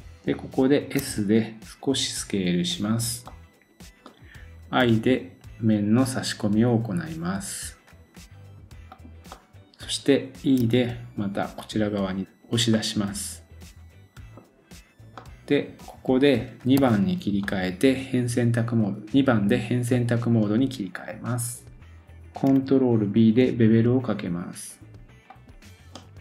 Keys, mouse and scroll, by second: 1.0 middle click, 1.0 s, 1.8-16.8 drag, 3.3 middle click, 4.8 i, 9.3 middle click, 10.6 e, 12.7 middle click, 15.1 middle click, 16.8 2, 17.4 middle click, 23.2 ctrl+b, 25.3 click, 25.7 scroll down 1, 26.0 middle click.